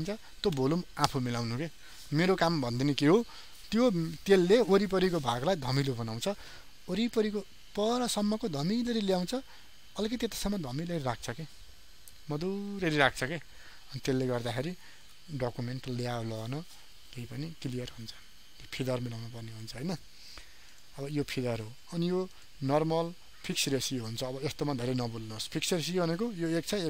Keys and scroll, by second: 15.1 ctrl+d, 17.9 ctrl+alt+z.